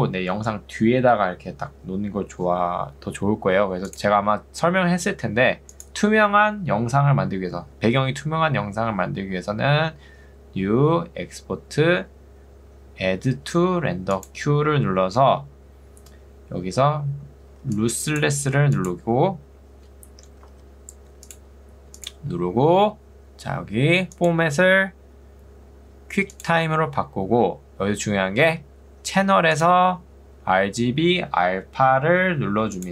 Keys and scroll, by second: 17.7 ctrl+2, 20.3 Escape, 20.7 ctrl+2.